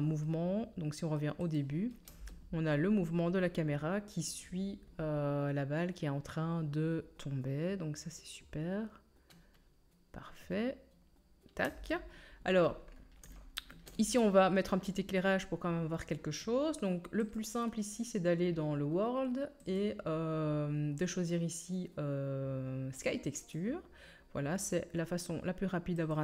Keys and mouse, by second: 2.1 space, 5.5-9.6 middle drag, 11.6 space, 13.5-17.3 shift+middle drag, 17.3-19.6 drag, 19.6-26.2 middle drag.